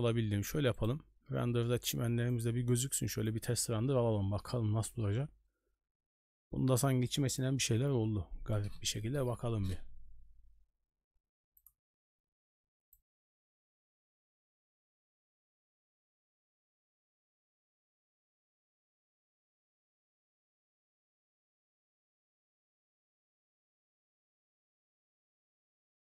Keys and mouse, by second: 0.7 click, 1.3 n, 2.3-3.4 drag.